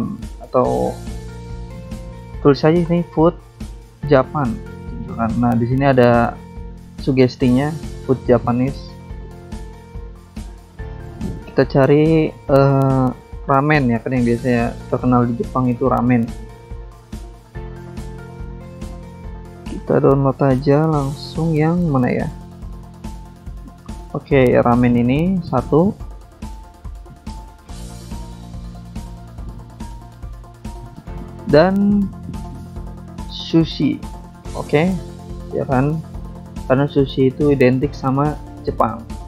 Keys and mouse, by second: 0.3 alt+Tab, 1.4 click, 2.3 click, 2.9 ctrl+a, 3.3-4.4 typing, 6.3 click, 6.5 click, 10.6 alt+Tab, 10.9 alt+Tab, 12.3 click, 13.0 click, 14.7 click, 17.3 alt+Tab, 17.7 alt+Tab, 18.5 click, 20.4 click, 22.8 click, 22.9 click, 24.6 click, 24.8 click, 25.2 click, 25.3 click, 26.8 click, 26.8 click, 30.1 click, 31.4 click, 33.0 click, 35.0 click, 36.3 click.